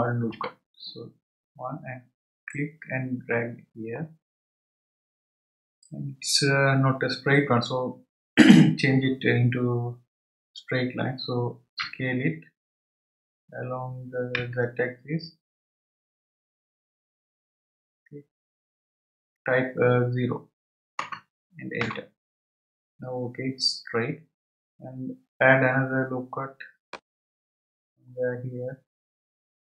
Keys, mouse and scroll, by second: 2.5-5.6 drag, 26.9-29.7 drag.